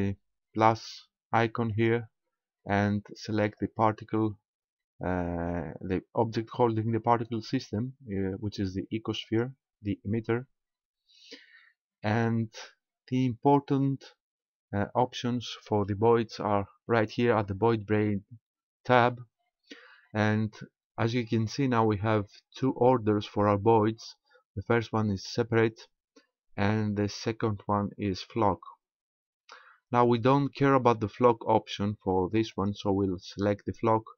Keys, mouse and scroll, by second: 1.7 click, 3.4 click, 10.6-11.2 scroll down 2, 11.2-12.4 scroll down 3, 12.4-13.9 scroll down 2, 28.9-30.8 scroll down 2, 32.6 click.